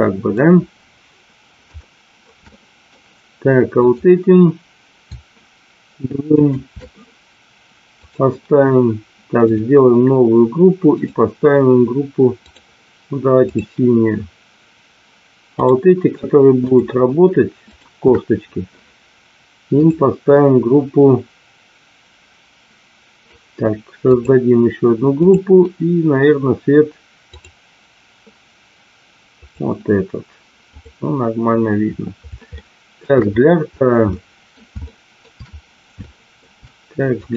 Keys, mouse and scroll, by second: 1.7-2.2 shift+middle drag, 2.4-2.8 middle drag, 3.8 click, 6.3 shift+click, 7.9-8.9 drag, 9.6 click, 10.8-12.8 drag, 15.4 click, 16.5 shift+click, 17.5 shift+click, 19.7-23.2 drag, 24.1 click, 25.1-27.6 drag, 29.4 click, 30.7 click, 32.6-32.9 shift+middle drag, 34.0 middle click, 34.7 shift+middle click, 35.9 shift+middle click, 37.2 click.